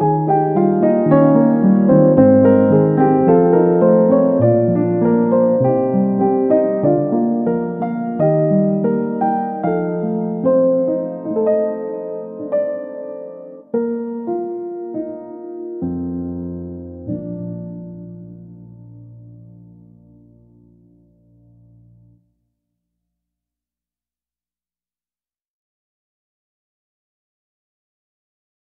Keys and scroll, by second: 26.5 Delete.